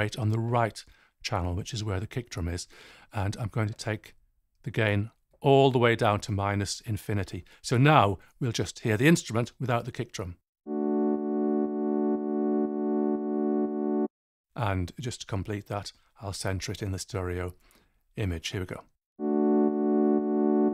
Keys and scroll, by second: 10.5 space, 14.0 space, 19.1 space.